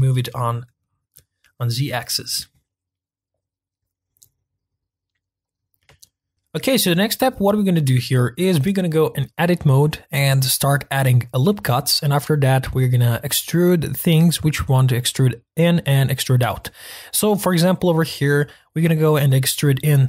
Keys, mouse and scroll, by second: 6.0-6.3 shift+middle drag, 6.3-7.2 scroll down 1, 16.8-20.0 middle drag.